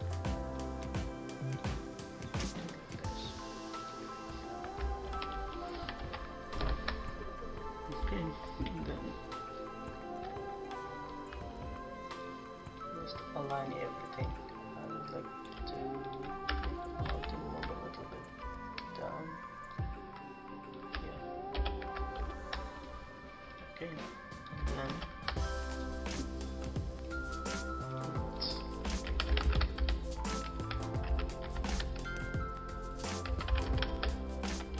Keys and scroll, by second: 5.0 ctrl+-, 5.3 ctrl+-, 5.7 ctrl+=, 5.9 ctrl+=, 17.1 ctrl+shift+t, 21.5 shift+Return, 22.1 ctrl+shift+-, 24.8 ctrl+=, 29.0-31.6 typing, 33.2-34.7 typing.